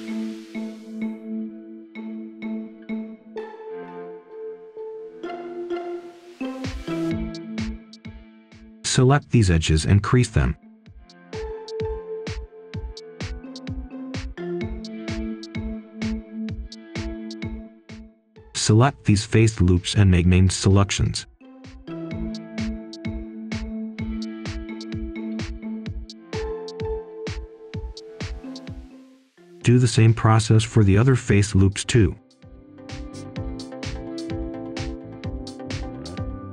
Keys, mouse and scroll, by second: 0.2 right click, 0.8 scroll down 1, 1.2 right click, 1.8 Tab, 2.2 scroll down 1, 3.0 scroll up 1, 3.8 Tab, 4.3 scroll up 1, 5.1 ctrl+shift+click, 5.6-6.0 scroll down 1, 6.0 right click, 7.1-8.0 scroll up 1, 8.3 ctrl+click, 9.0 c, 9.4 e, 9.7 Return, 10.7 scroll down 1, 11.1 right click, 11.7 Tab, 12.1 click, 12.3 Tab, 13.6 scroll up 1, 13.9 Escape, 14.5 ctrl+shift+click, 19.9-20.9 typing, 21.3 Return, 22.8 click, 28.2 right click, 29.2 Escape, 29.9-35.3 ctrl+shift+drag.